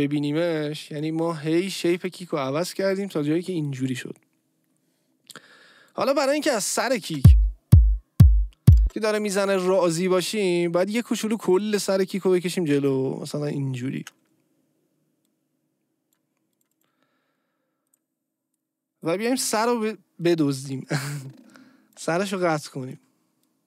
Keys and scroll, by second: 7.0 space, 8.8 space, 19.5 Delete, 20.7 Delete, 22.0 Delete.